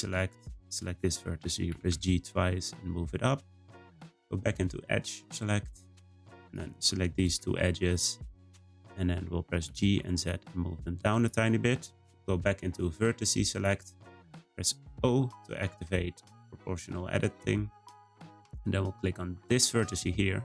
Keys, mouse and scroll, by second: 1.7 g, 5.2-6.5 drag, 7.1 shift+click, 7.6-9.6 middle drag, 9.6 g, 11.5-13.5 middle drag, 13.5-14.9 drag, 14.9 o, 16.1-16.6 scroll up 1, 16.6-19.6 shift+middle drag, 19.6 click, 20.3 middle click.